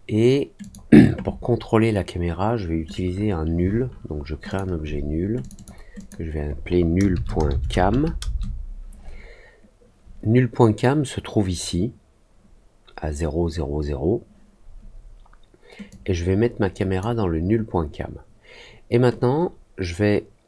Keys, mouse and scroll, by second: 0.5 click, 4.4 click, 5.3 click, 5.5 click, 5.9 click, 15.8-16.9 drag.